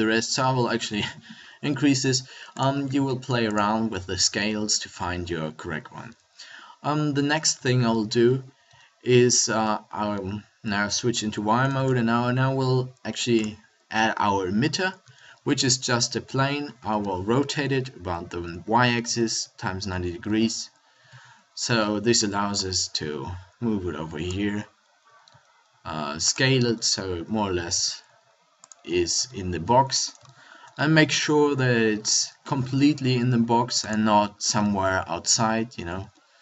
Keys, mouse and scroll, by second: 2.9 ctrl+a, 7.5 a, 8.6 z, 11.7 shift+a, 15.0 r, 20.2 KP_1, 21.0 KP_5, 25.0 s, 26.3 click, 26.7-28.1 middle drag, 27.5 s, 28.1 click, 28.7 click, 29.1 KP_7, 32.0 s.